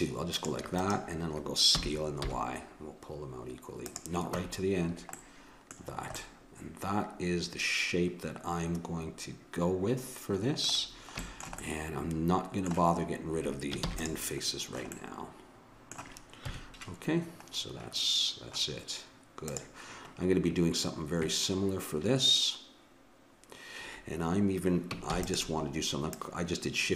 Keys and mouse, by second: 1.7 s, 4.4 Tab, 10.8-12.7 middle drag, 13.8 ctrl+s, 16.4 KP_1, 19.5-21.4 drag, 25.0 shift+d, 26.1-26.9 drag.